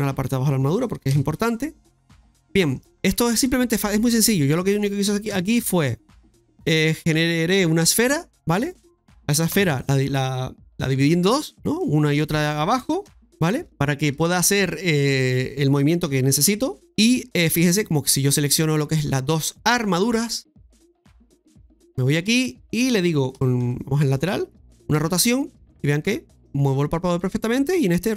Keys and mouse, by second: 0.3 shift+right click, 2.3 middle click, 3.1 shift+middle click, 4.5 shift+middle click, 5.3 KP_1, 5.5 KP_3, 6.7 shift+middle click, 8.7 right click, 9.2-10.0 typing, 10.6 KP_Divide, 10.6 KP_Divide, 11.8 middle click, 14.3 shift+right click, 14.3 typing, 15.0 shift+right click, 15.7 shift+right click, 16.6-18.3 typing, 16.8 middle click, 18.3 right click, 20.4 click, 21.9 right click, 22.3 middle click, 23.3 KP_1, 23.6 KP_3, 24.9 KP_1, 25.0 r, 27.5-28.1 typing, 27.7 right click.